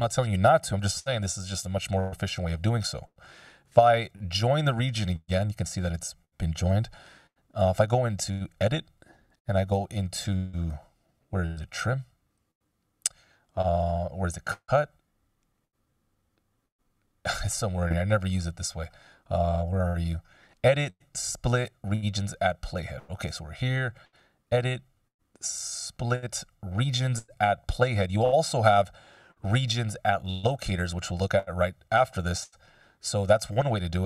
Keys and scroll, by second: 0.7 t, 2.2 F16, 2.8 super+z, 5.2 /, 6.6 ..